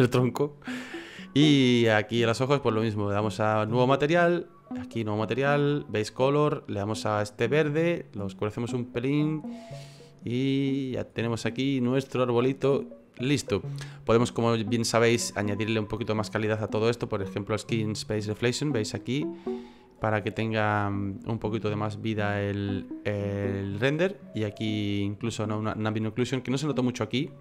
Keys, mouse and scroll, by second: 1.9 right click, 4.6 click, 5.9 click, 10.7 right click, 11.3 middle click, 15.3 click, 18.0 click, 19.5 shift+middle click, 20.1 middle click, 24.3 click, 25.9 middle click, 26.5 middle click, 26.9 middle click, 27.3-27.4 scroll up 4.